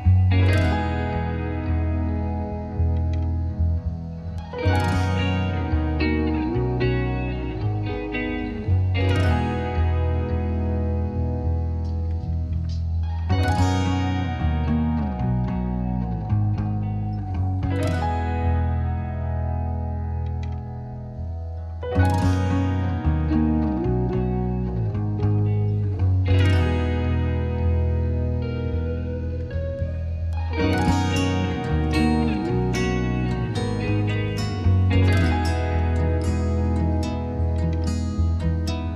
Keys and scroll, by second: 7.3 8.